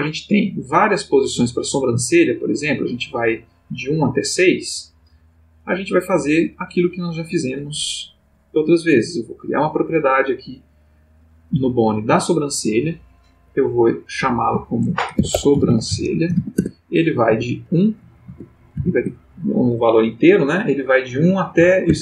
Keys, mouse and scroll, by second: 0.0 click, 1.5-5.7 drag, 6.5 click, 8.5 click, 9.2 click, 13.4 click, 14.2 click, 15.1-17.2 typing, 16.5 shift+Tab, 18.2 Tab, 18.7 1, 19.0 Tab, 21.8 1.